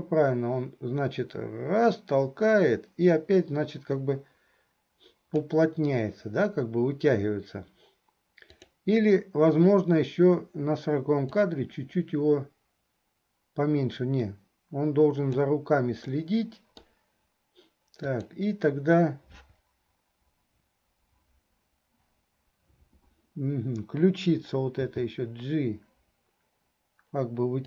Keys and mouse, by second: 11.6-15.8 drag, 16.3 click, 16.3 right click, 18.1 click.